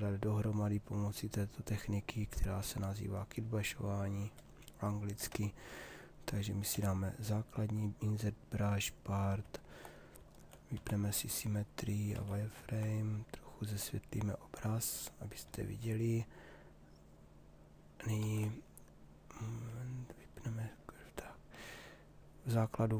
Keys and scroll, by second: 6.2 b, 10.3 x, 12.1 shift+f, 17.9 ctrl+z.